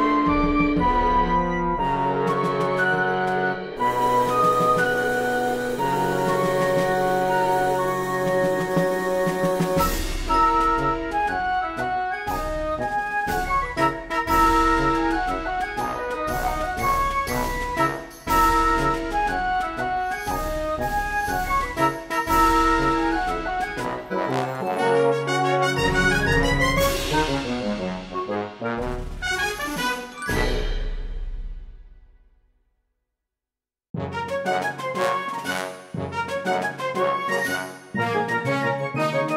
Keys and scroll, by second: 0.6 space, 1.7 space, 5.9 space, 9.5 space, 10.0 ctrl+z, 11.2 ctrl+z, 12.8 ctrl+z, 13.7 ctrl+z, 14.4 space, 15.2 space, 15.6 space, 16.4 space, 17.5 space, 18.5 space, 20.1 space, 22.5 ctrl+z, 27.9 space, 28.2 ctrl+z, 29.2 ctrl+z, 30.2-33.0 typing, 30.4 ctrl+z, 33.5 ctrl+z, 34.3 space, 34.5 b, 35.6 ctrl+z, 35.9 b, 36.2 ctrl+z, 37.1 ctrl+z, 37.5 ctrl+z, 37.8-39.3 typing.